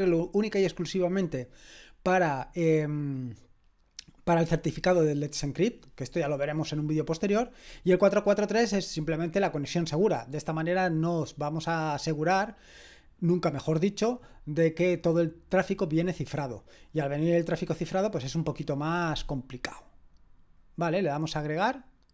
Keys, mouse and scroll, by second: 20.5 click.